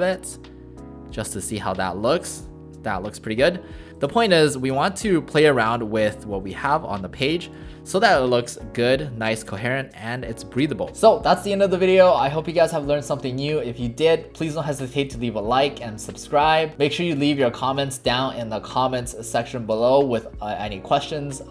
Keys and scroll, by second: 3.9 ctrl+shift+z.